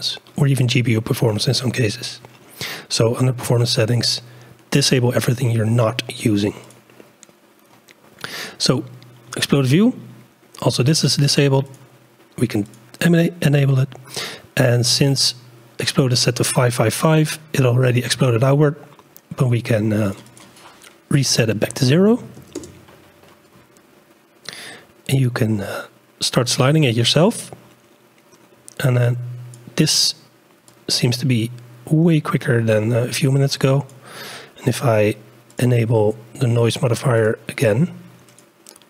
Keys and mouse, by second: 6.6 click, 11.6 click, 19.4 click, 20.3-22.7 drag, 22.7-25.7 middle drag, 25.7 click, 26.3 click, 26.6 middle click, 28.1 middle click, 28.5 middle click, 29.2 click, 30.9-34.0 drag, 35.5 click, 37.2-38.8 drag.